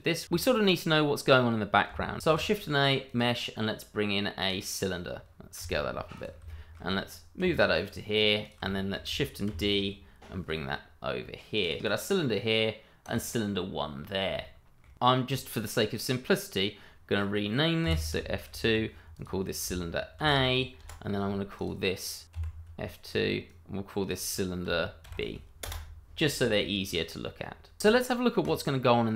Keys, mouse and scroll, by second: 2.2 shift+a, 3.0 click, 5.6 s, 6.1 click, 6.6 shift+middle click, 7.4 g, 8.4 click, 8.7 shift+middle click, 9.6 shift+d, 11.6 click, 12.3 shift+middle click, 13.3 click, 14.3 scroll up 1, 14.7 shift+middle click, 14.9 click, 17.8 F2, 19.1 click, 20.2 shift+a, 20.8 Return, 21.5 click, 22.3 F2, 23.4 click, 25.0 shift+b, 25.6 Return, 28.4 click.